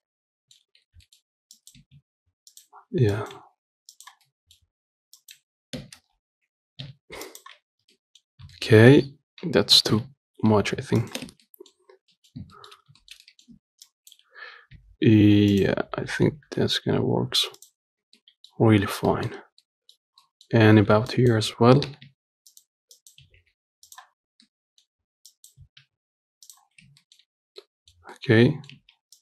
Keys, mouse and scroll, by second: 0.2 middle click, 1.1 scroll up 1, 1.3 shift+middle click, 1.8 click, 2.1 g, 3.4 click, 3.6 g, 4.5 middle click, 5.4 click, 5.6 g, 7.9 scroll down 3, 8.1 Tab, 8.2 middle click, 8.6 scroll up 1, 8.8 shift+middle click, 9.3 Tab, 10.0 g, 11.5 Tab, 11.7 middle click, 12.2 scroll down 2, 12.4 middle click, 12.6-13.0 scroll up 2, 12.8 shift+middle click, 13.3 shift+middle click, 13.8 Tab, 14.1 click, 15.0 g, 16.3 g, 18.2 scroll down 2, 18.3 Tab, 18.5 middle click, 19.1 scroll down 2, 19.3 middle click, 19.6-19.9 scroll up 3, 19.9 middle click, 20.2 scroll up 1, 20.5 middle click, 21.0 Tab, 21.4 Left, 22.2 g, 23.2 click, 23.5 g, 24.7 middle click, 25.6 click, 25.9 g, 27.0 scroll down 1, 27.1 Tab, 27.3-29.0 middle drag, 29.0 Tab.